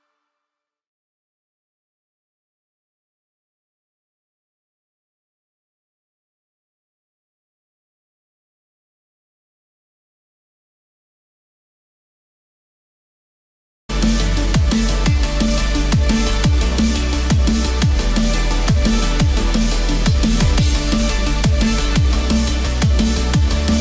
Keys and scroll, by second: 13.2 ctrl+-, 20.7 ctrl+=.